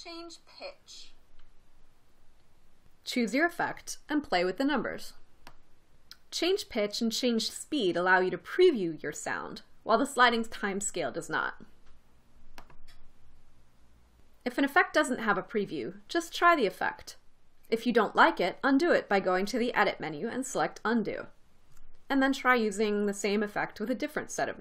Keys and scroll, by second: 0.1 space.